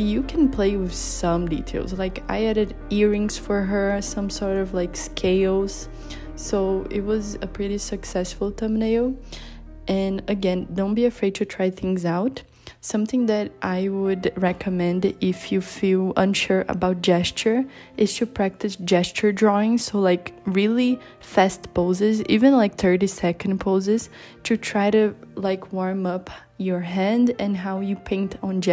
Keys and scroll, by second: 13.0 b, 13.4 i, 13.9 b, 20.7 super+z.